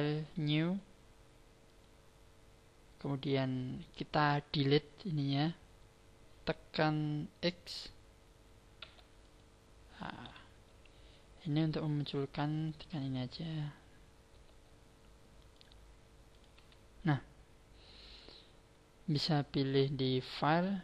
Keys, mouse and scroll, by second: 13.6 n, 14.3 n, 16.5 n, 20.2 click.